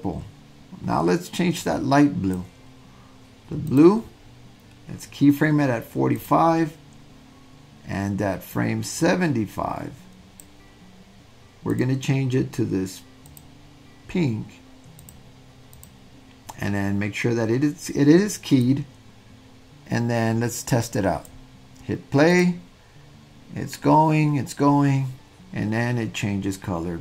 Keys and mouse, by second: 3.7 click, 6.3 click, 8.6-10.5 drag, 11.7 click, 15.8 click, 18.8-21.4 drag, 22.4 drag.